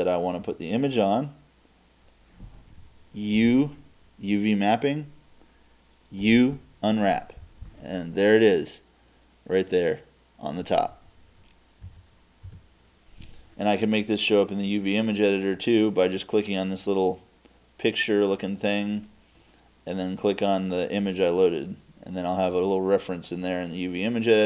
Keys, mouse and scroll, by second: 9.3 middle click, 11.8 Tab, 12.4 Tab.